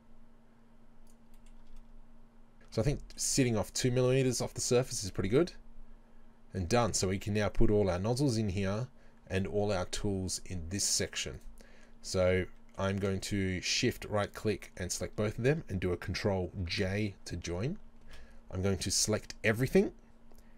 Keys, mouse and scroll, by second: 1.2 shift+click, 1.4-8.9 shift+middle drag, 1.8 scroll up 1, 2.5 scroll down 1, 2.7 Tab, 3.3 z, 4.0 scroll down 1, 10.1 middle click, 10.8 scroll down 1, 11.0-11.4 middle drag, 11.4 right click, 11.9 scroll down 1, 12.5-14.4 middle drag, 14.4 shift+right click, 16.8 ctrl+j, 18.1 Tab.